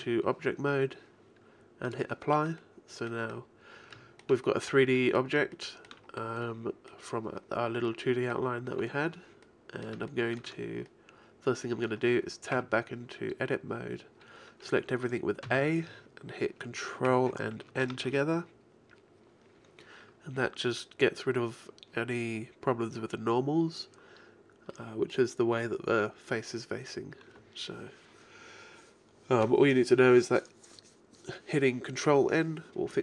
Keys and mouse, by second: 0.4 middle click, 1.9-4.0 drag, 3.3 middle click, 12.6 Tab, 15.5 a, 17.9 ctrl+n, 24.7-26.8 middle drag.